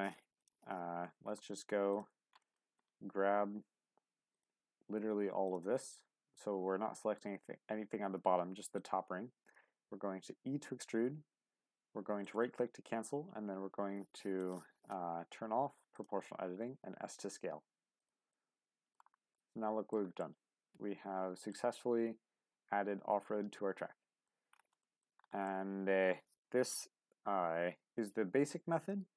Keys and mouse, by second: 0.4 click, 0.9 Tab, 2.5 shift+click, 4.3 ctrl+click, 6.4 click, 10.0 e, 12.9 s, 14.4 click, 15.9 click, 18.0 click, 18.3 middle click, 19.3 middle click, 20.2-21.5 middle drag, 21.8-24.3 middle drag, 24.8 shift+middle click, 25.5-29.1 middle drag.